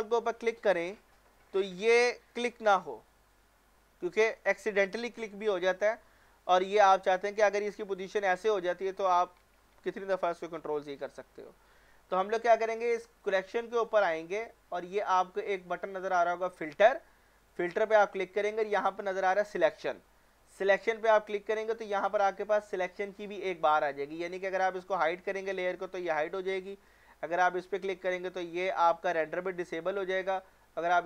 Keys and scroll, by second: 9.6 ctrl+z.